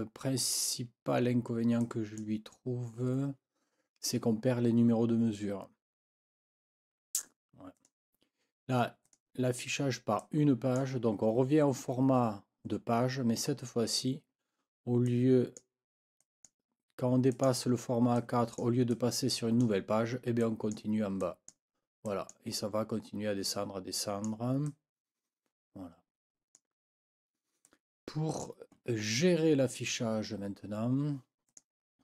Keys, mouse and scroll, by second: 1.8 click, 7.7 click, 9.1 click, 10.2 click, 13.8 ctrl+scroll down 2, 15.1 click, 15.5 scroll up 1, 16.2-16.6 scroll up 1, 17.3-17.6 scroll up 1, 18.1-18.8 scroll up 1, 18.9-19.8 scroll up 1, 20.4-21.7 scroll up 2, 22.1-22.5 scroll up 1, 23.9-26.7 scroll up 2, 27.7 click, 31.5 click.